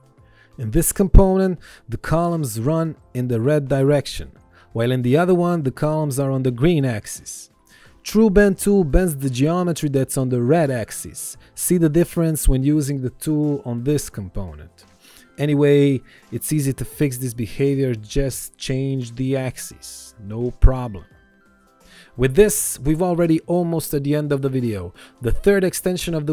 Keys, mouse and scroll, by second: 1.0 click, 12.6 Return, 13.2 click, 17.4 ctrl+z, 18.4 click, 18.9 right click, 19.8 click, 24.2 Return, 24.8 click.